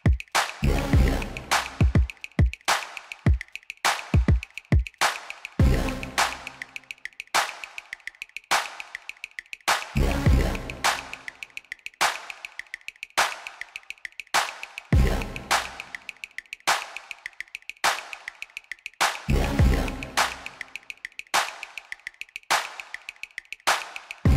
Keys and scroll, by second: 4.5 3, 5.4 shift+z, 6.6 1, 7.3 alt+a, 7.7 b, 11.5 g, 11.7 y, 17.2 g, 17.5 y, 24.1 shift+z.